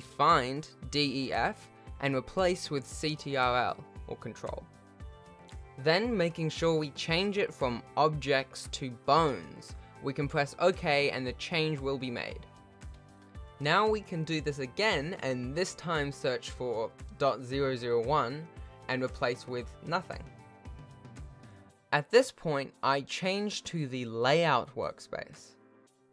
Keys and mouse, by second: 3.8 BackSpace, 4.0 BackSpace, 6.8-9.9 drag, 11.2 F2, 12.8 BackSpace, 13.0 BackSpace, 14.5 click, 14.8 F3, 18.0 0, 21.2 shift+middle click, 22.0 ctrl+Tab, 22.2 z, 24.5 click.